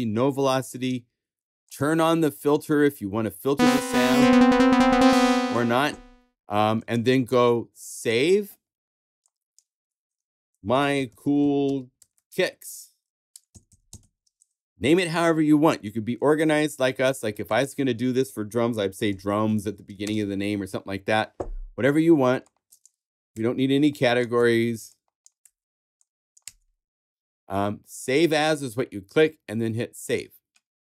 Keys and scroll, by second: 10.2-14.5 typing, 18.5-19.9 typing, 23.3 BackSpace.